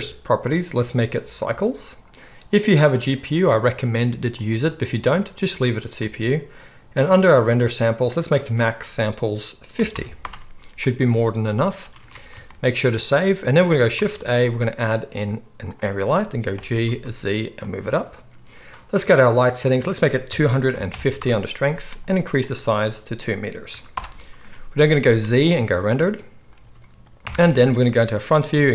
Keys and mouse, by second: 0.7-17.7 drag, 11.8 ctrl+s, 12.0 ctrl+s, 13.9 shift+a, 16.5 g, 17.7-19.6 middle drag, 19.6-28.7 drag, 25.0 z, 27.2 KP_1.